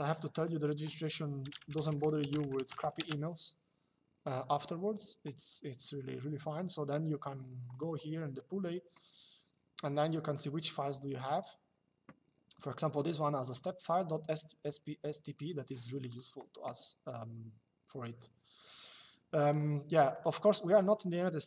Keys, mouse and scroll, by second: 1.2 r, 2.7 KP_Enter, 7.4 click, 15.8 click, 19.1 click.